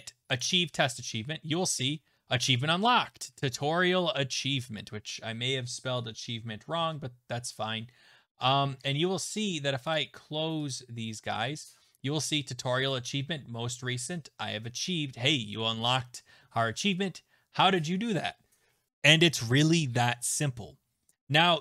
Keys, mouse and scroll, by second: 6.8 Tab, 9.9 click, 10.7 click, 20.3 Tab.